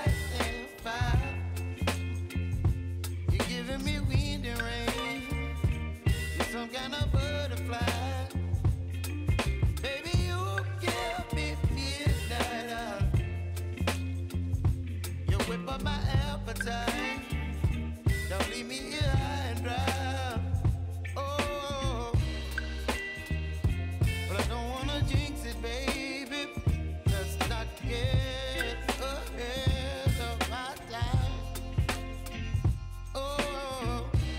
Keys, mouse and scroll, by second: 6.3 click, 10.8 shift+b, 11.8 ctrl+a, 12.9 click, 14.9-16.9 typing, 17.9 ctrl+a, 18.9 click, 22.1 shift+n, 24.0 click, 25.5 ctrl+alt+Home, 27.1 click, 30.9 s, 31.6-34.3 drag.